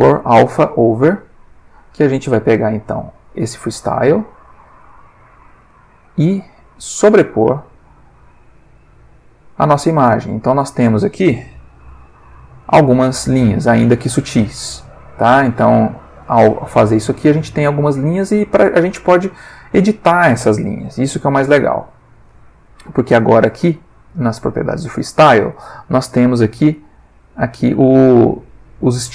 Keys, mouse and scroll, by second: 0.5 click, 1.6 click, 3.0-4.4 drag, 4.5 middle click, 5.7 ctrl+middle click, 6.4-7.5 drag, 7.6 click, 8.4 click, 9.3 click, 10.3-11.1 ctrl+middle drag, 11.7 alt+v, 15.6 click, 17.8-18.6 ctrl+middle drag, 21.1 space, 21.4 click, 21.9 Escape, 25.7 middle click, 27.1 click, 27.6-28.7 middle drag.